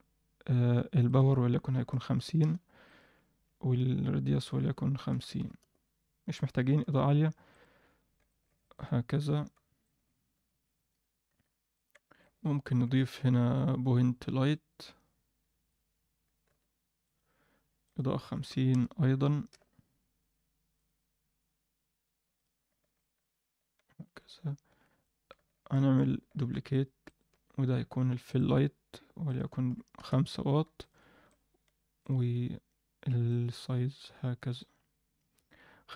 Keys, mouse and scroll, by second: 1.0-2.4 drag, 1.0-2.4 scroll down 2, 2.8-5.6 drag, 7.8-8.4 scroll up 2, 8.2 alt+shift+middle click, 8.6 ctrl+middle click, 9.2 KP_7, 9.8 shift+middle click, 10.3 g, 11.3 r, 12.2 shift+right click, 13.3 shift+a, 15.4 KP_1, 16.4 g, 17.8-19.5 drag, 20.7 click, 22.3 click, 25.0 click, 26.4 shift+d, 27.3 r, 29.2 click, 30.8 click, 33.2-34.6 drag, 35.3 KP_0, 35.8-35.9 alt+middle drag.